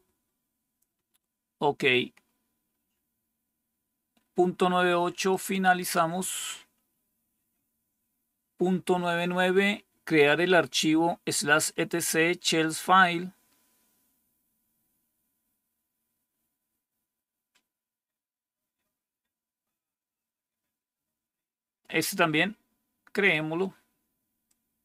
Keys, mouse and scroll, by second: 2.0 scroll down 1, 2.6 scroll down 1, 5.2 click, 24.4-24.8 drag.